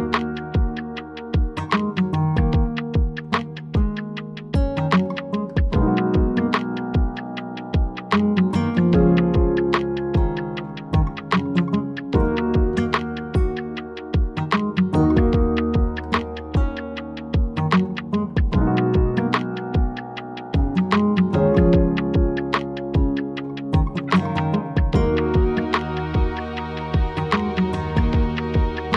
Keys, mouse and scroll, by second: 0.5 click, 1.2 scroll down 2, 1.4 scroll up 2, 1.7-2.8 scroll down 15, 2.9-4.2 scroll up 17, 4.2-4.5 scroll down 3, 4.6 scroll, 4.8 middle click, 4.9 middle click, 5.2 click, 7.7 click, 10.5 click, 12.0 click, 13.3 e, 13.9 click, 14.4-14.9 scroll down 2, 14.9-15.3 scroll up 2, 15.3 scroll down 1, 15.8 ctrl+z, 16.2-16.8 scroll down 3, 16.8-17.6 scroll up 13, 18.5 scroll, 18.5 click, 19.2 click, 20.7 click, 20.8 ctrl+z, 22.4-23.4 scroll down 3, 23.4 scroll, 23.4 l, 28.1 o.